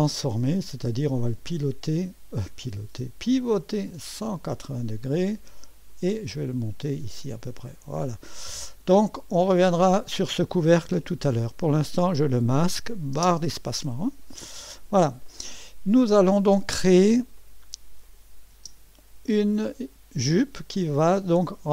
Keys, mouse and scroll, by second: 5.9-6.9 drag, 7.6 click, 8.3 click, 11.7 click, 13.1 space, 14.2 right click, 15.0 click, 17.3 click, 17.8 click, 18.5 space.